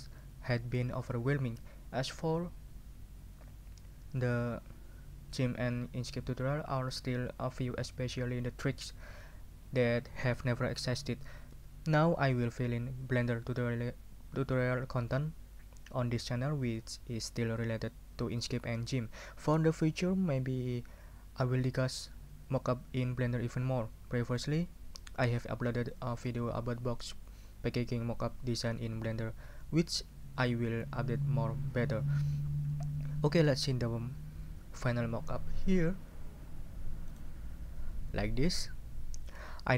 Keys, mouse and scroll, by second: 37.1 click.